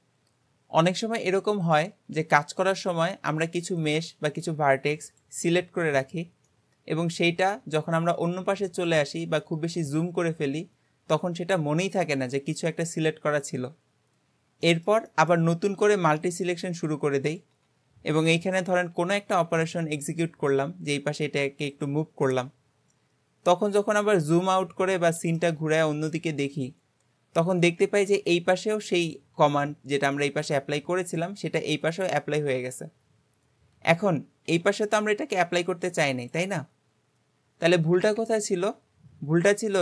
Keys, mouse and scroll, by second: 1.7 click, 2.2 Tab, 2.7-3.8 middle drag, 3.8 click, 4.3 shift+click, 5.1 shift+click, 6.5-9.4 middle drag, 9.4-10.0 scroll up 1, 10.0-13.1 shift+middle drag, 13.9-14.7 scroll up 1, 14.7-15.8 shift+middle drag, 15.8 shift+click, 16.3 shift+click, 16.8 shift+click, 17.3 shift+click, 18.9 g, 23.3-24.4 scroll down 2, 24.4-38.2 middle drag, 38.7-39.8 scroll up 2.